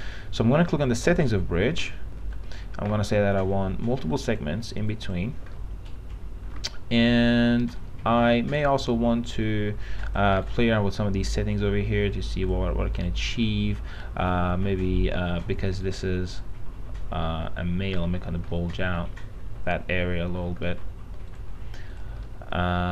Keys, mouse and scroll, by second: 0.9 click, 2.1 alt+middle click, 4.4-5.6 drag, 5.8 alt+middle click, 9.1-10.4 drag, 10.6 right click, 11.8 click, 13.1 right click, 13.6-16.0 drag, 16.0 right click, 16.6-18.7 drag, 20.8 middle click, 21.5 click, 22.5 middle click, 22.8-22.9 scroll down 1.